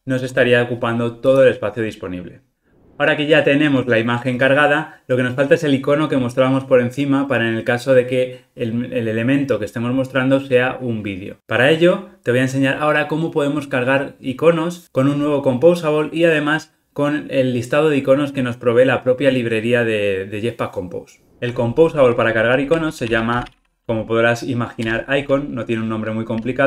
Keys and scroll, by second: 24.9 Return.